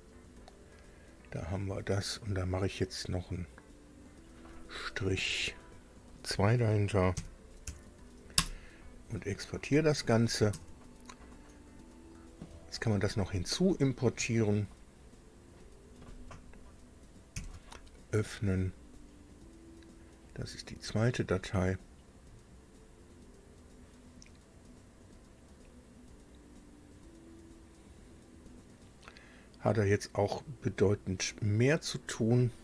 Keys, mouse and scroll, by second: 1.2 click, 3.7 click, 5.1 BackSpace, 7.0 -, 7.4 2, 8.2 Return, 10.6 alt+Tab, 11.5 scroll down 2, 14.5-15.5 drag, 17.1 ctrl+o, 18.9 scroll down 2, 19.9 click, 20.8 click, 30.5 click.